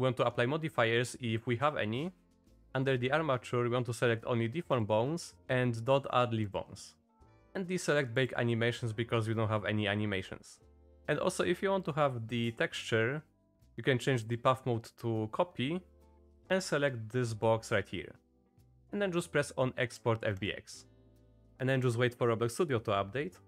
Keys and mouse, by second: 21.4 click.